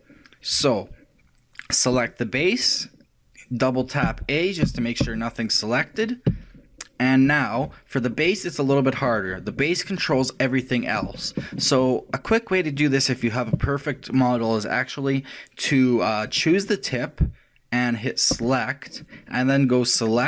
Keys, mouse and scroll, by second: 2.0 click, 4.2 a, 4.7 a, 5.0 a, 6.3 a, 6.3 q, 6.8-9.7 middle drag, 10.9 shift+middle click, 11.5-12.9 shift+middle drag, 16.3 click, 18.4 click.